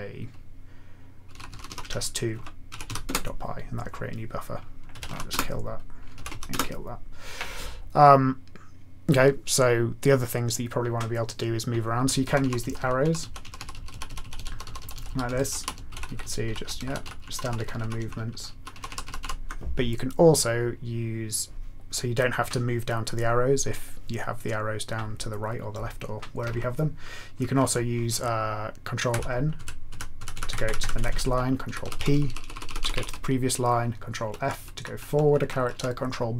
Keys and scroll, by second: 1.0-3.3 typing, 4.9 ctrl+x, 5.0 k, 5.2 Return, 6.1 ctrl+x, 6.3 k, 6.5 Return, 12.3 Up, 12.4 Up, 12.6 Down, 12.7 Down, 13.0 Up, 13.2 Down, 13.4 Up, 13.5 Up, 13.7 Down, 13.9 Down, 14.0 Down, 14.2 Down, 14.6 Down, 14.8 Down, 15.0 Down, 15.2 Up, 15.4 Up, 15.7 Down, 15.8 Right, 16.0 Right, 16.3 Right, 16.4 Up, 16.6 Left, 16.7 Down, 16.8 Right, 17.0 Up, 17.2 Up, 17.5 Up, 17.7 Left, 18.0-19.7 typing, 29.2 ctrl+n, 29.5 ctrl+n, 29.9 ctrl+n, 30.1 ctrl+n, 30.3 ctrl+n, 30.6 ctrl+n, 30.8 ctrl+n, 31.1 ctrl+n, 31.2 ctrl+n, 31.6 ctrl+p, 31.8 ctrl+p, 31.9 ctrl+p, 32.1 ctrl+p, 32.5 ctrl+p, 32.9 ctrl+p, 34.2 ctrl+f, 34.4 ctrl+f, 34.5 ctrl+f, 34.7 ctrl+f, 35.1 ctrl+f, 35.4 ctrl+f, 35.5 ctrl+f, 36.3 ctrl+f, 36.3 ctrl+b.